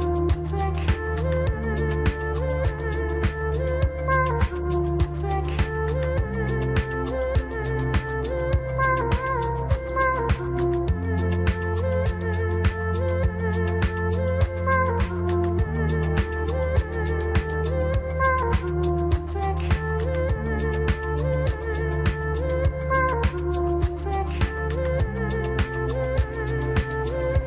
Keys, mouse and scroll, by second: 3.3 KP_1, 8.1 click, 8.9 shift+click, 9.8 shift+click, 10.4 shift+click, 11.1 shift+click, 13.6 m, 25.9 click, 26.5 drag.